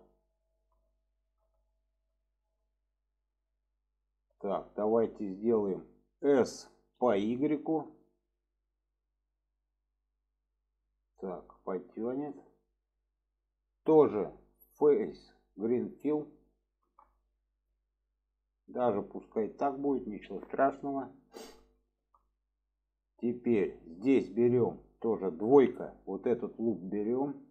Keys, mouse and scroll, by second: 0.9-1.5 shift+middle drag, 1.7 middle click, 2.3 shift+middle drag, 2.8 scroll up 1, 3.0-4.5 middle drag, 4.8 scroll up 1, 4.9 shift+middle click, 11.6 shift+middle drag, 12.5-13.1 middle drag, 14.8-16.1 drag, 16.6-16.9 shift+middle drag, 17.7 middle click, 20.3-20.7 middle drag, 21.8 shift+middle click, 23.0 middle click, 23.8 middle click.